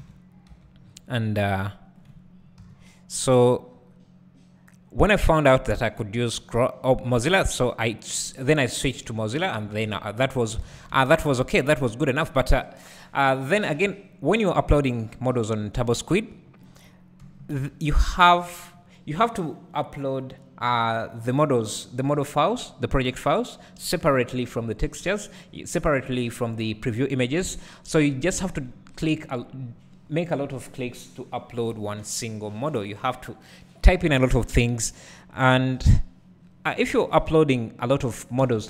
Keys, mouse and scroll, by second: 0.2 scroll down 2, 0.5 Tab, 0.8-2.1 scroll up 1, 3.5 scroll up 1, 6.2-37.3 drag, 8.8 scroll down 1, 9.1 Tab, 10.9 `, 13.3-13.8 scroll up 1, 13.8 `, 15.2-15.7 scroll down 1, 17.5 KP_1, 38.5 Tab.